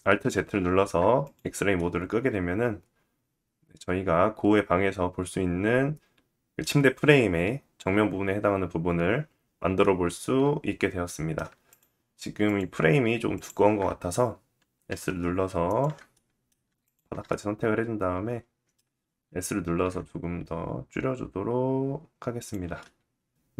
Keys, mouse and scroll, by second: 0.8 click, 1.3 middle click, 9.4 middle click, 11.2 click, 11.9 shift+click, 12.1-12.9 shift+drag, 13.0 shift+click, 14.3-15.7 drag, 14.4 s, 15.7 middle click, 16.4 shift+click, 16.5-19.4 shift+middle drag, 19.2 s, 22.9 middle click, 23.4 click.